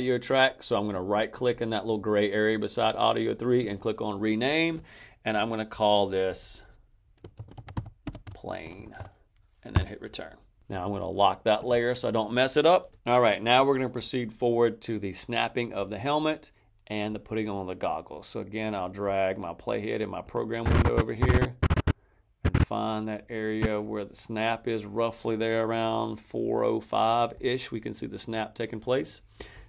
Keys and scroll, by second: 7.0-8.9 typing, 9.6 Return.